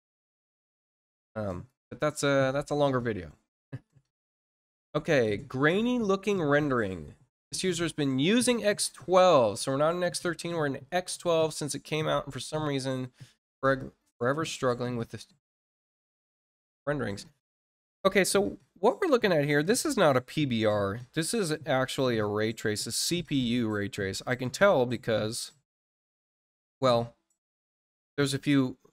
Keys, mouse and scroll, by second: 1.4 click, 4.5 scroll down 1, 5.0 scroll down 1, 15.3 click.